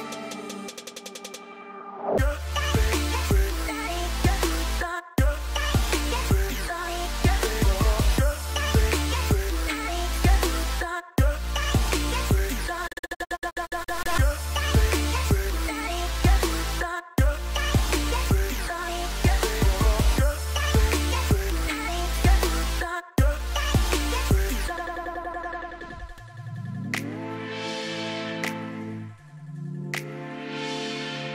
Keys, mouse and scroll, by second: 10.3 right click, 10.8 right click, 12.6 right click, 16.2 right click, 17.4 right click.